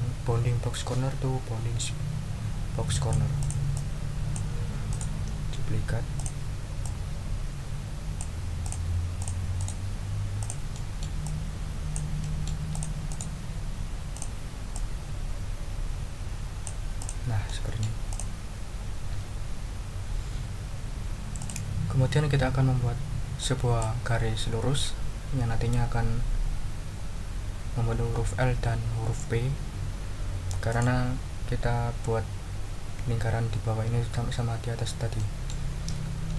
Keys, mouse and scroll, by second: 3.4 click, 4.4 click, 4.9 right click, 6.1 click, 6.8-8.3 drag, 8.6 click, 9.2 click, 9.6 right click, 10.4 click, 10.7 middle click, 12.2 right click, 12.7 click, 13.1 right click, 14.1 click, 14.7-16.8 drag, 17.0 click, 17.4 middle click, 18.1 click, 21.4 click, 23.4 click, 30.7 click, 35.2 click.